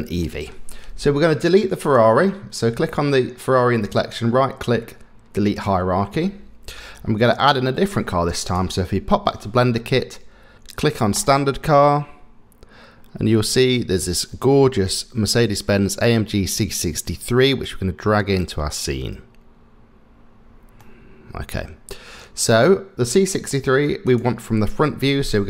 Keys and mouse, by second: 0.2 middle click, 3.9-5.9 right drag, 11.1 click, 20.8 middle click, 24.1 click.